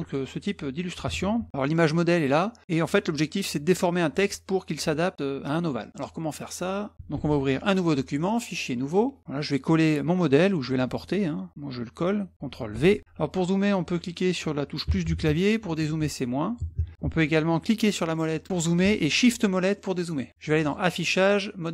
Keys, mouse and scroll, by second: 1.6-2.8 middle drag, 6.3 click, 6.7 click, 7.1 ctrl+c, 8.3 click, 8.8 click, 12.7 ctrl+v, 17.8 middle click, 18.1 middle click, 19.5 shift+middle click, 19.8 shift+middle click, 20.0 shift+middle click, 20.6 click.